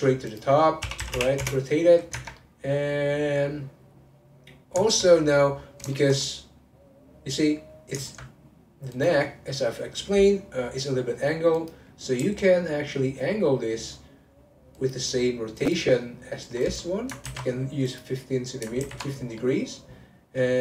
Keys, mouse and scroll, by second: 0.3-2.1 drag, 2.1 Tab, 2.3-5.3 middle drag, 5.5-5.9 scroll up 1, 5.9-8.9 shift+middle drag, 8.9 click, 11.5 click, 12.1 r, 15.6 click, 16.6 click, 17.2 ctrl+c, 17.9 click, 18.8 ctrl+v, 19.4-20.6 middle drag.